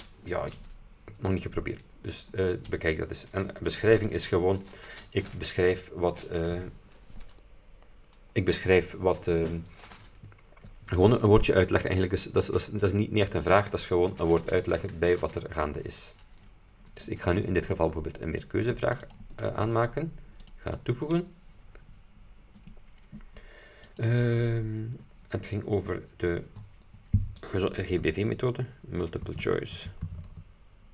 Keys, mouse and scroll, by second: 2.2-2.5 scroll down 2, 2.8-3.2 scroll down 2, 4.1 click, 17.4-18.8 scroll up 2, 19.1 click, 20.5 click, 23.9 click, 29.1-30.9 typing.